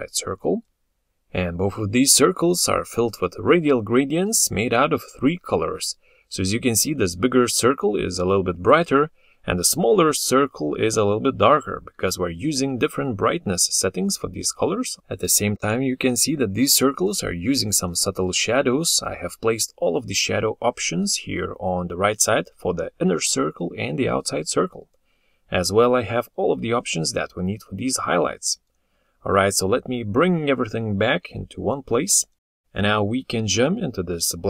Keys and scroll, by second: 28.5 ctrl+z, 29.9 ctrl+z.